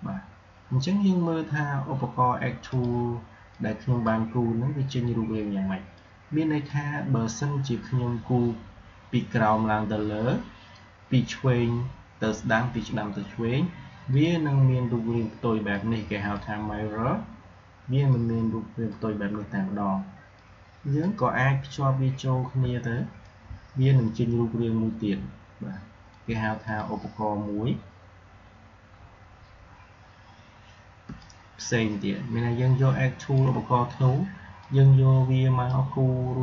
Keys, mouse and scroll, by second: 2.5-9.1 drag, 14.0-26.5 drag, 28.0 super+scroll down 1, 29.0 alt+scroll down 1, 29.7 alt+scroll up 1, 30.9 space, 31.1-32.5 drag, 31.3 space, 32.5 space, 34.5-36.4 drag.